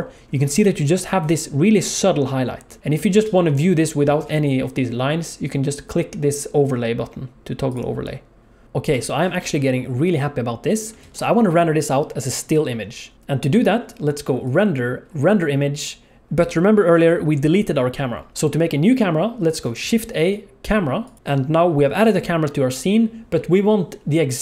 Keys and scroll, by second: 3.1 alt+shift+z, 11.0 ctrl+s, 18.3 ctrl+z, 18.3 shift+a, 19.8 shift+a.